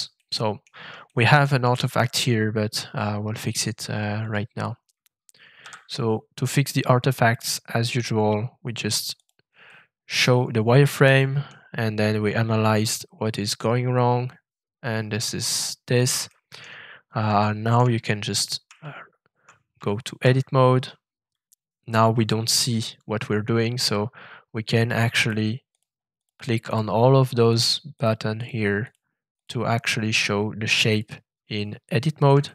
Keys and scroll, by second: 5.6 f, 19.7 ctrl+shift+Tab.